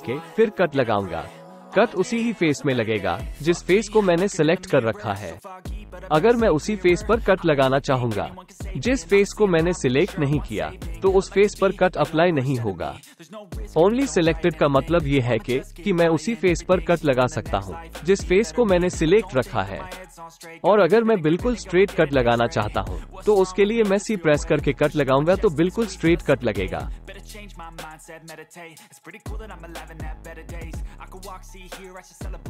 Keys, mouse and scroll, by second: 2.0 click, 19.3 KP_1, 21.6-22.2 alt+shift+drag, 23.2 click, 24.3 click, 24.5-25.1 drag, 26.0 click, 26.8 click, 27.5 k, 28.3 c, 31.8 middle click, 32.2 click, 32.2 right click.